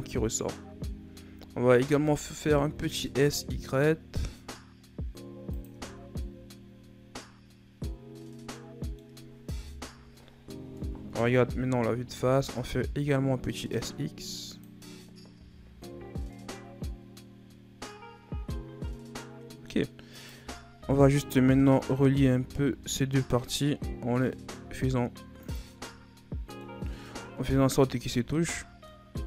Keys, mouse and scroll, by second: 0.7 Tab, 1.8 s, 5.7 Tab, 6.0 scroll down 2, 6.2-9.2 middle drag, 9.6 KP_1, 10.8 Tab, 12.0 s, 15.4 Tab, 16.3 scroll down 2, 16.5-19.5 middle drag, 20.1 right click, 20.8 KP_3, 21.6 scroll up 1, 21.9 Tab, 22.3 a, 22.5 a, 23.7 g, 25.9 middle click, 26.9-27.4 scroll down 4, 27.4 Tab, 27.8 a, 27.9-28.3 scroll down 3, 28.3-29.2 middle drag.